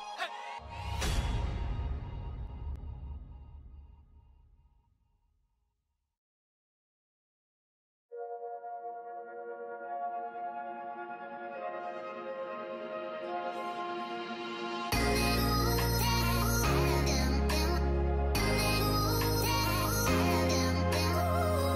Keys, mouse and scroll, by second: 4.8 shift+click, 5.5-5.8 scroll down 1, 6.8 shift+click, 11.0 shift+click, 12.4 ctrl+z, 13.3 shift+click, 14.6 shift+click, 15.2 shift+click, 16.0 shift+click, 17.5 shift+click, 20.0 ctrl+z, 21.0 shift+click.